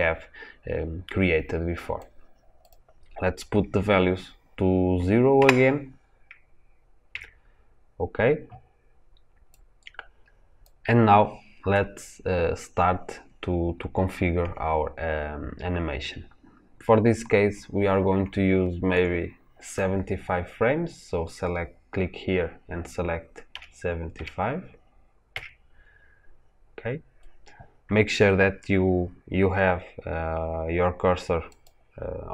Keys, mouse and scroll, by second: 7.1 KP_Enter, 9.5-31.6 drag.